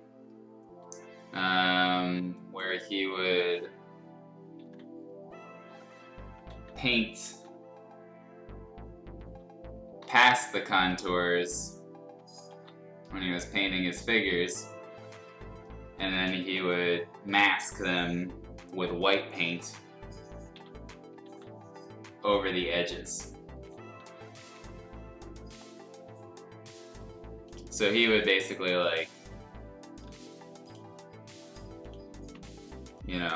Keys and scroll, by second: 2.1 space, 3.0 b, 3.6 x, 4.6 ctrl+z, 6.5 ctrl+z, 7.2 ctrl+z, 10.0 x, 10.7 ctrl+z, 11.0 x, 12.5 ctrl+z, 20.5 x, 21.2 ctrl+z, 24.0 ], 24.1 ], 31.2 l.